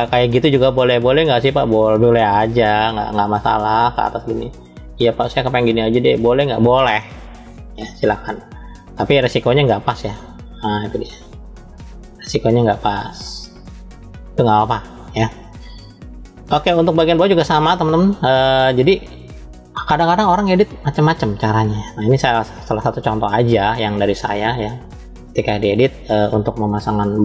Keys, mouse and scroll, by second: 0.1 shift+middle click, 1.8 click, 3.7 click, 4.6 click, 6.4 click, 6.7-9.0 middle drag, 9.8-11.2 drag, 11.5-15.1 middle drag, 16.4 scroll down 2, 17.3 scroll down 1, 18.9-19.7 drag, 20.8 click, 21.6-22.6 middle drag, 21.6 scroll up 1, 24.8-25.6 drag, 26.4-27.2 middle drag.